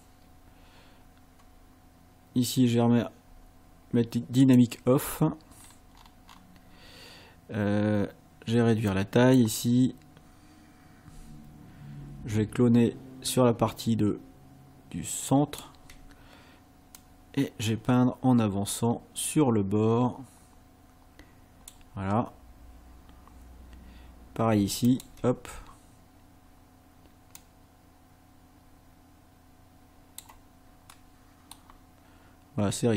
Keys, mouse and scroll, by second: 1.8 scroll up 1, 4.4 click, 5.6-6.5 scroll up 3, 8.9 click, 15.3 ctrl+click, 17.0-21.9 drag, 22.3 scroll up 2, 24.9 ctrl+click, 27.4-30.4 drag, 30.9 middle click.